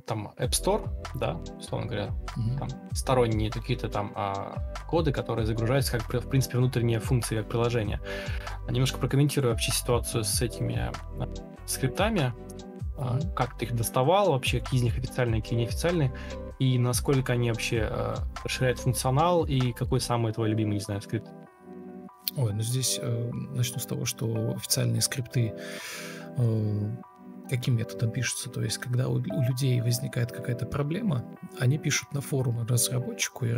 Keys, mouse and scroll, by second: 0.9 ctrl+space, 6.9 ctrl+e, 7.3 ctrl+space, 10.0 ctrl+space, 11.3 ctrl+d, 11.9 ctrl+z, 12.3 ctrl+e, 14.1 ctrl+d, 18.7 Escape, 19.8 Delete, 21.4 ctrl+z, 22.9 shift+t, 24.0 Delete, 25.0 ctrl+d, 26.7 ctrl+click, 27.8 shift+r, 28.1 Left, 28.1 Right, 28.6 ctrl+x, 28.9 Left, 29.0 Right, 29.3 ctrl+z, 29.4 ctrl+z, 29.5 ctrl+z, 30.2 ctrl+shift+r, 30.4 ctrl+click, 30.6 Left, 30.7 Right, 30.8 Down, 30.9 Up, 32.7 Escape, 32.7 Escape, 33.1 1.